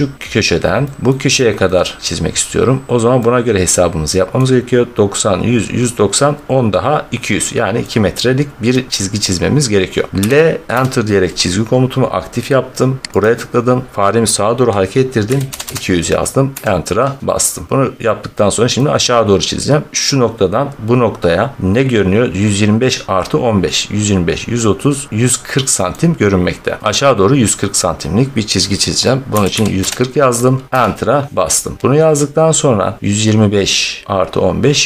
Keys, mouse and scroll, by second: 1.0 middle click, 1.1 scroll, 1.6 scroll, 2.7 scroll, 4.2 scroll, 7.7 scroll, 8.6-9.0 scroll, 9.2 scroll, 10.1 l, 10.6 Return, 11.8 scroll, 13.1 click, 15.2 typing, 16.4 Return, 18.6 middle click, 20.3 scroll, 20.3 typing, 25.8 middle click, 26.7 middle click, 26.8 middle click, 27.8 scroll, 29.2-29.7 typing, 30.7 Return, 31.8 click, 33.0 middle click.